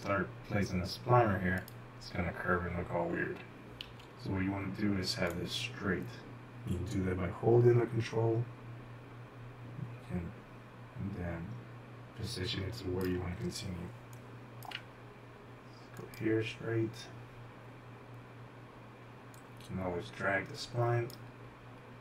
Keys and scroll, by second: 4.4 ctrl+z, 14.5-14.8 typing.